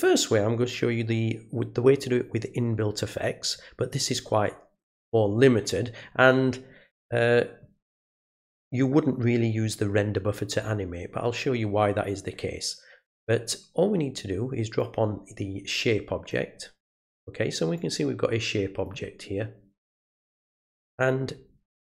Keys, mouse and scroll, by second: 14.8-16.3 drag, 17.7-18.8 drag, 19.9 click.